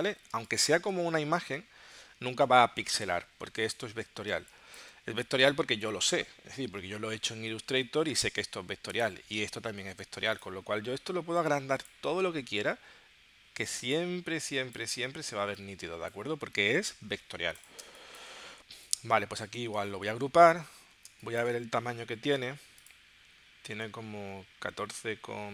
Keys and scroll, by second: 0.4 space, 4.3 space, 16.9 super+z, 17.8 space, 20.1 super+g, 21.1 space.